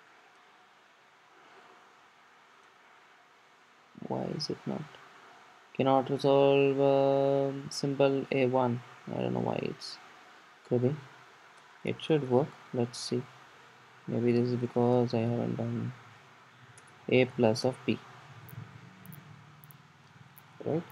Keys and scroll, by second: 10.9 super+z, 13.1 super+z, 13.1 Escape, 16.8 Escape, 16.9 Return, 19.4 Escape, 20.6 Escape, 20.7 super+s.